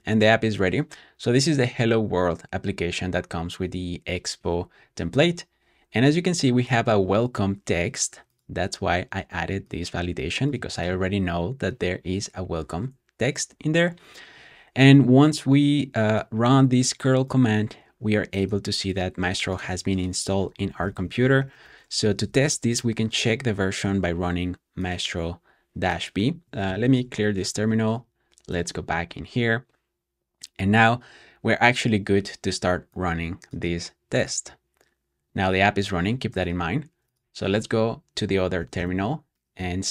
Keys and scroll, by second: 20.4-22.7 typing, 26.6 typing, 27.4 shift+super+[, 38.4-39.9 typing.